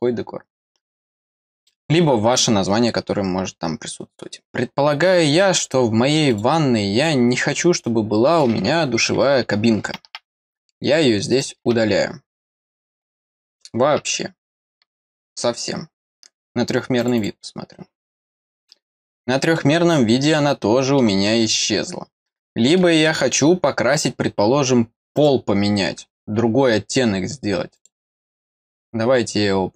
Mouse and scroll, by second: 1.6 middle click, 6.3 click, 11.3 click, 13.2 click, 17.0 click, 17.1 click, 19.5-21.0 middle drag, 21.2 middle click, 21.7 middle click, 22.2 middle click, 23.0-25.1 middle drag, 25.1 click, 27.7 click.